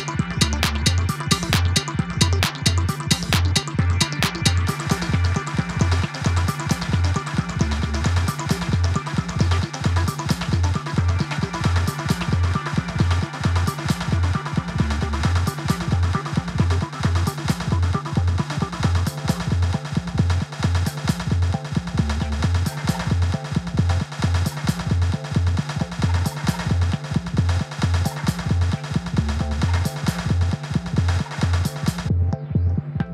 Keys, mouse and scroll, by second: 0.0-1.4 drag, 2.4 middle click, 2.9 alt+shift+click, 3.5 e, 5.3 scroll down 2, 5.4 middle click, 6.0 scroll up 2, 6.7 ctrl+r, 8.0 ctrl+r, 9.0 click, 9.3 scroll up 3, 9.5 middle click, 10.1 ctrl+r, 11.4 click, 11.7 ctrl+r, 12.7 click, 13.0 scroll down 2, 13.2 scroll up 2, 13.7 click, 14.3 scroll down 3, 14.5 scroll up 1, 14.7-16.2 middle drag, 17.2-17.8 scroll down 4, 17.8 ctrl+s, 18.1 scroll down 1, 18.2-18.9 scroll up 4, 18.5 click, 18.9-20.3 middle drag, 20.3 scroll up 2, 20.4 click, 20.8 middle click, 21.6 click, 23.1 f, 23.8-24.3 scroll up 1, 24.3 i, 25.1 ctrl+z, 25.7-27.5 drag, 28.1 click, 28.8 middle click, 29.3-30.7 drag, 30.7 i, 32.4 click, 32.7 middle click.